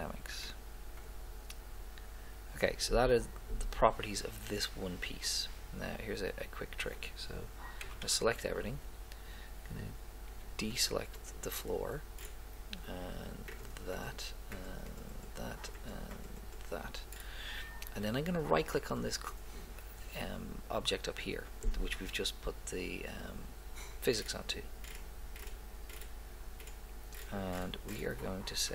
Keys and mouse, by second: 1.1-2.9 drag, 7.8 a, 8.0 a, 28.5 click.